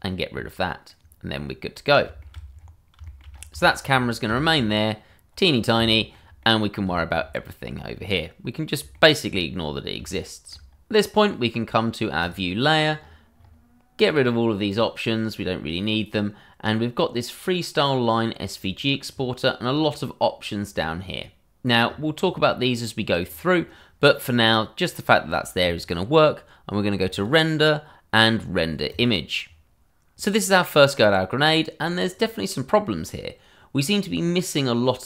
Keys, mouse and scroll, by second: 0.9 middle click, 2.2 shift+middle click, 2.2 middle click, 2.5-3.0 scroll down 1, 3.0 shift+middle click, 3.1 middle click, 3.3-3.6 scroll up 1, 3.6 shift+middle click, 4.4 middle click, 5.1-5.7 scroll up 1, 5.9 shift+middle click, 5.9 middle click, 6.0 shift+middle click, 7.0 shift+middle click, 7.2-7.7 scroll up 1, 8.6 shift+middle click, 9.0 middle click, 9.7 shift+middle click, 10.1-10.4 scroll up 1, 10.4 shift+middle click, 12.2 click, 13.7-14.0 scroll up 1, 14.7 click, 19.5 scroll down 1, 21.8-22.7 scroll up 1, 27.1 click.